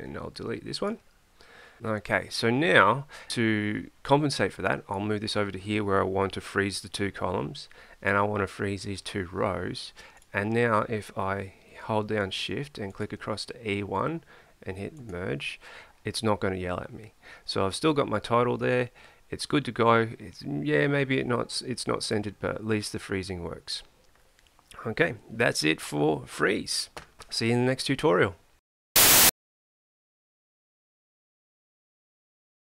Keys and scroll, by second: 1.8 Delete.